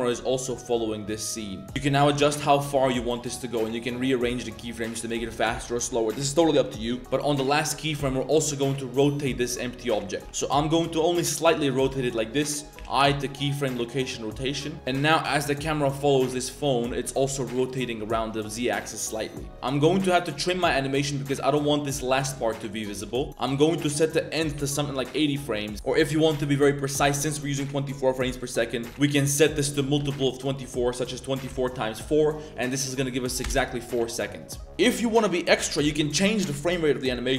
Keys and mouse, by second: 1.7 click, 2.5 click, 2.8 click, 4.6 click, 7.0 shift+s, 14.7 click, 14.7 space, 14.9 space, 18.9 click, 19.2 click, 23.0 space, 23.4-24.9 drag, 25.6 click, 28.9-33.5 drag.